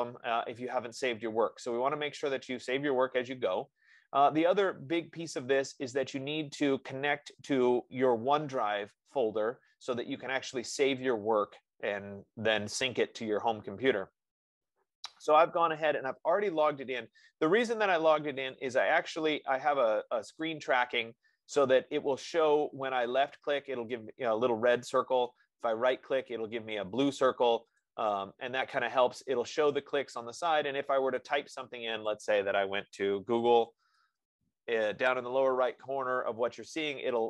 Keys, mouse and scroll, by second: 18.9 click, 20.8 click, 23.5 click, 25.7 right click, 28.2 click, 32.5 click, 33.5-35.1 typing, 33.8-37.2 drag.